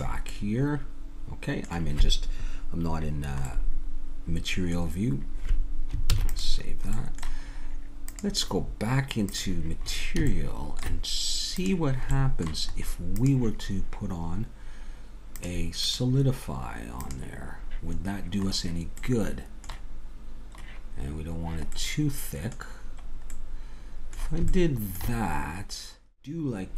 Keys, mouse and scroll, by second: 0.3-2.1 middle drag, 3.5-4.6 middle drag, 6.1 ctrl+s, 8.0-9.3 drag, 10.0 click, 11.6-16.4 drag, 25.7 Tab.